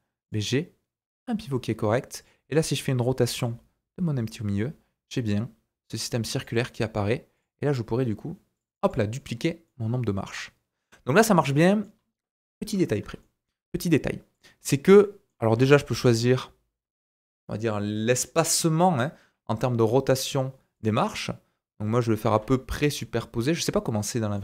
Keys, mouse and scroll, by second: 0.2 click, 2.2 click, 2.5-3.2 middle drag, 3.2 r, 7.3 click, 8.5-14.4 drag, 9.6 middle click, 11.9-13.0 scroll up 2, 13.2 shift+middle click, 14.4-24.4 middle drag, 15.5 r, 22.3 r.